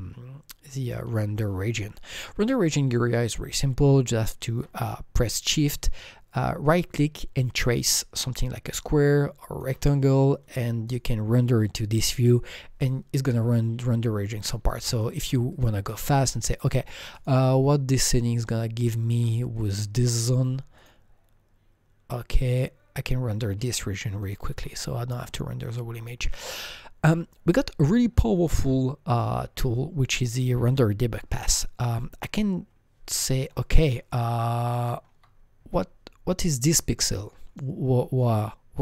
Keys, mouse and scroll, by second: 0.8 click, 0.8 scroll up 1, 0.8 click, 1.0 Delete, 2.1-2.8 scroll down 4, 2.8-4.1 scroll up 5, 6.6-9.9 shift+right drag, 9.9 scroll down 3, 10.8 click, 14.1 scroll down 1, 14.1 click, 14.9 click, 15.5 click, 15.8-16.6 scroll down 5, 16.6 click, 16.6 click, 17.1 click, 17.4-18.1 scroll up 2, 17.4 click, 18.1-18.5 scroll down 1, 18.8 alt+middle click, 19.5 shift+right click, 21.2 click, 21.2-23.4 shift+right drag, 21.2 alt+middle click, 24.2 click, 24.2 shift+right click, 24.2 alt+middle click, 24.2 click, 24.6-27.8 alt+middle drag, 27.0 click, 27.8-30.6 scroll up 90, 31.9 scroll up 1, 32.6-32.9 scroll down 6, 33.1 alt+middle click, 33.7 alt+double middle click, 34.2 alt+middle click, 35.2-36.7 scroll up 12, 36.7-37.4 scroll down 3, 37.6 scroll up 3, 38.3 shift+right click.